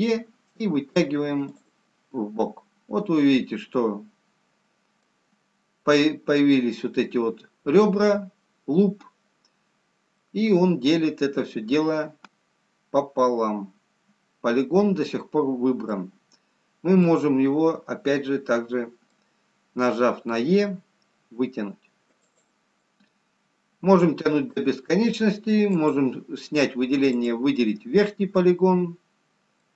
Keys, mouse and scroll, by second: 2.5 middle click, 10.1 middle click, 16.8-17.2 scroll down 2, 17.7 middle click, 20.5 e, 23.3 middle click, 26.4 click, 27.1 click, 28.6 middle click.